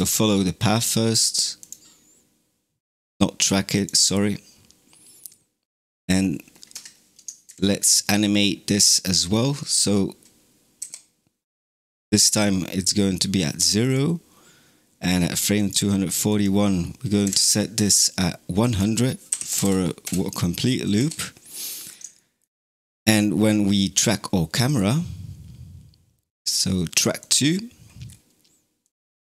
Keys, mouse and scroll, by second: 0.0-1.5 drag, 5.9-7.3 drag, 7.3 shift+Left, 13.7-17.1 drag, 17.1 Left, 18.6 click, 19.5 KP_0, 20.8 i, 21.7 scroll up 2, 22.0-22.8 shift+middle drag, 22.8 click, 27.2 click, 27.9-28.7 scroll down 3, 28.7 click.